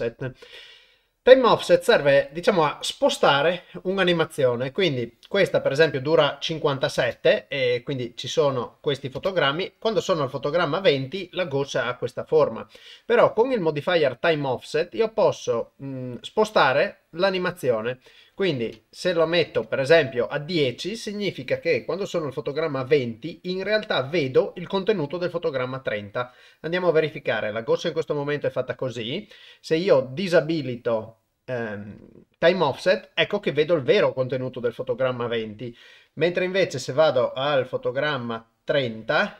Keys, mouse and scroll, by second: 5.0-5.5 drag, 7.0 shift+space, 9.2 shift+space, 9.8 click, 15.2 click, 16.7 click, 16.9 click, 17.1 click, 17.2 click, 17.4 click, 17.6 click, 17.8 click, 18.7 click, 32.0 click, 36.8 click, 37.3-38.9 drag.